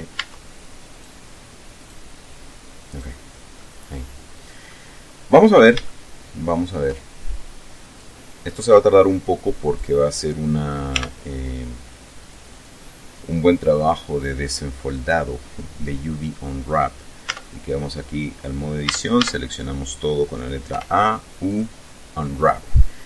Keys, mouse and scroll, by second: 0.3 Tab, 1.1 right click, 1.9 right click, 3.0 right click, 3.8-5.0 middle drag, 5.1 scroll down 1, 5.5-6.0 scroll up 1, 6.0-7.1 shift+middle drag, 8.1-10.1 drag, 11.1 t, 12.3 click, 15.1 click, 17.4 Tab, 18.9 a, 20.8 u, 21.6 click.